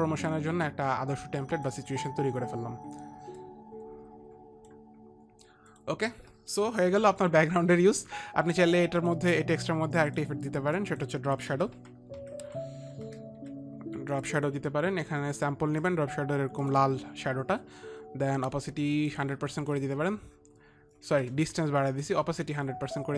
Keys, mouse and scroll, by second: 3.2 s, 3.9 click, 6.2 click, 6.2 s, 10.7 click, 11.4 click, 11.8-14.4 typing, 12.0 click, 12.8 click, 16.3 click, 18.0 click, 19.6 click, 21.9 ctrl+z.